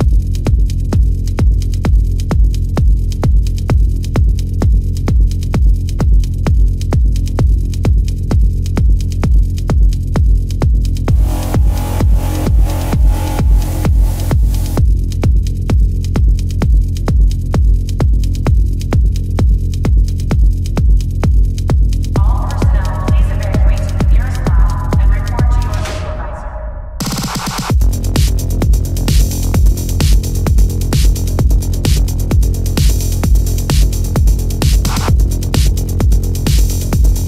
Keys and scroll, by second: 1.8 ctrl+=, 8.1 ctrl+=, 8.4 space, 11.7 ctrl+alt+z, 12.1 ctrl+alt+z, 12.9 space, 14.2 ctrl+alt+z, 15.7 ctrl+alt+z, 16.5 ctrl+alt+z, 20.5 ctrl+alt+z, 21.8 ctrl+alt+z, 23.7 ctrl+alt+z, 25.4 ctrl+alt+z, 29.4 ctrl+alt+z, 30.3 ctrl+alt+z, 33.0 ctrl+=, 34.2 ctrl+alt+z, 35.0 ctrl+=.